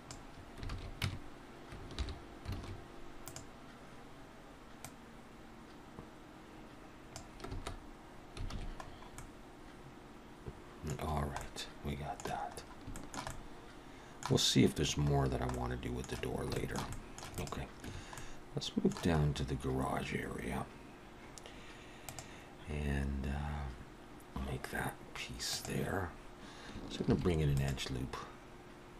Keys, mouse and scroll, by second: 0.1 click, 0.7 alt+a, 1.0 Tab, 2.0 alt+h, 2.5 alt+a, 3.1 click, 4.8 click, 7.5 alt+space, 8.5 alt+a, 8.8-9.2 scroll down 3, 9.1 middle click, 11.0-11.5 scroll down 2, 11.4 middle click, 12.6-12.9 scroll up 2, 12.9 shift+middle click, 13.3 middle click, 15.1-15.6 scroll down 2, 15.5 middle click, 16.6 shift+middle click, 16.9 middle click, 17.4 click, 17.9 Tab, 18.2 middle click, 19.2 scroll up 3, 27.1 ctrl+r.